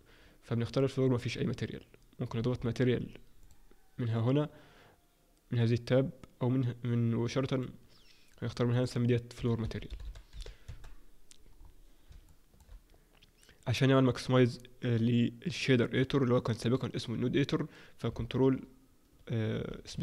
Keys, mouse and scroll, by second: 12.0 alt+o, 12.0-12.6 scroll up 3, 12.6 shift+middle click.